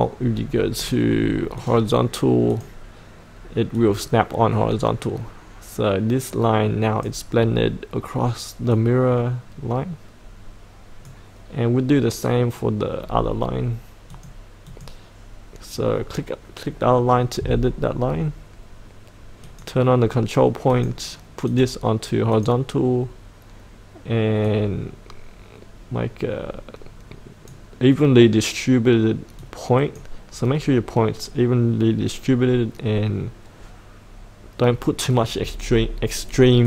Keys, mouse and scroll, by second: 13.0-14.1 scroll down 1, 14.1-28.2 drag.